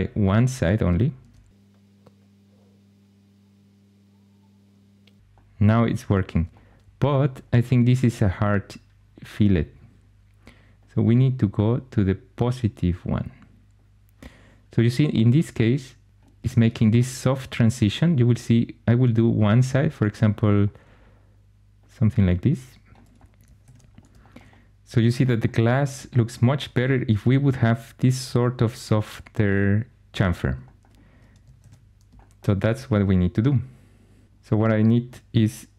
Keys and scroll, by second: 23.5 shift+super+e, 31.5 shift+super+e.